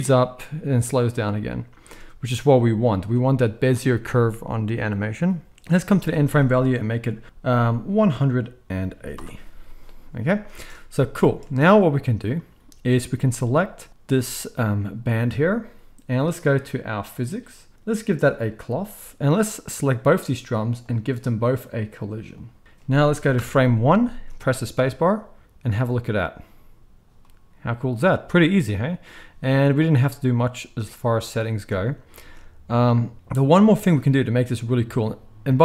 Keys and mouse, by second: 1.7 space, 10.5 space, 11.4 space, 13.9-17.1 middle drag, 17.1 click, 17.2 middle click, 18.1-19.7 drag, 19.7-20.8 middle drag, 20.8 click, 21.7 middle click, 22.3-35.6 drag, 23.4 shift+Left, 24.1 space, 31.5 space, 32.2 space, 33.8 space.